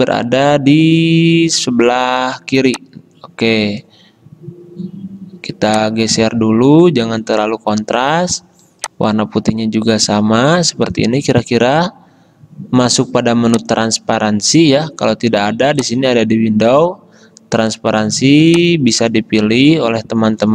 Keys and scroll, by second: 19.6 v.